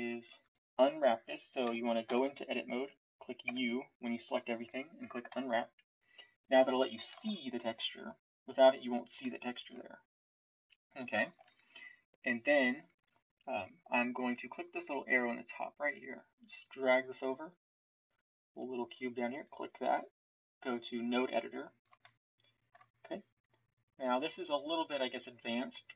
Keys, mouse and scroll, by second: 1.6 Tab, 3.4 u, 7.1 shift+z, 11.3 shift+z.